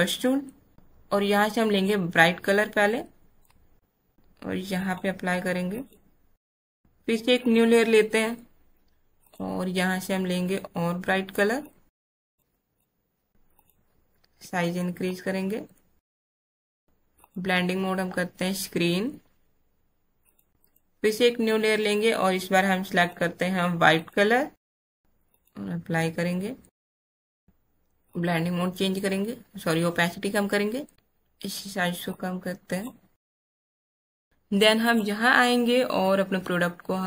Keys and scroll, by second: 34.2 BackSpace.